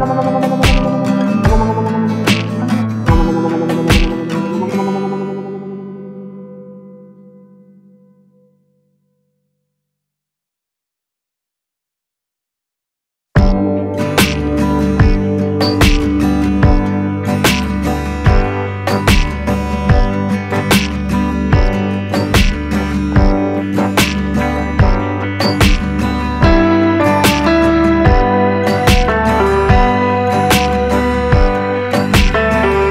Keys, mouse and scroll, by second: 23.6-29.3 drag, 30.5-32.9 drag.